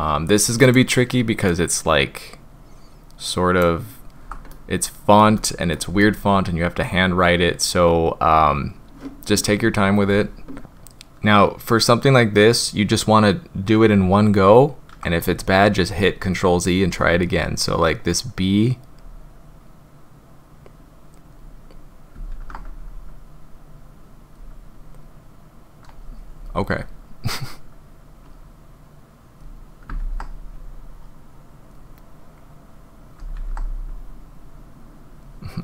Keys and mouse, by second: 0.6 click, 4.5-5.2 shift+drag, 5.4 click, 6.0-6.8 shift+drag, 10.6 ctrl+z, 19.0-21.3 drag, 22.3 ctrl+z, 22.8-24.3 drag, 28.2-29.4 drag, 30.0 ctrl+z, 30.5-31.7 drag, 33.3 ctrl+z, 33.9-35.2 drag.